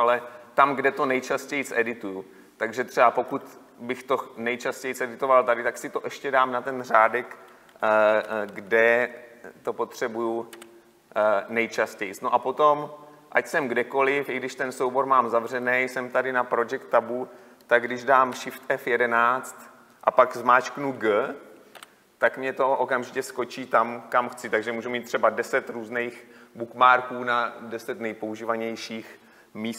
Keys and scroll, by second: 8.5 ctrl+F11, 18.7 shift+F11.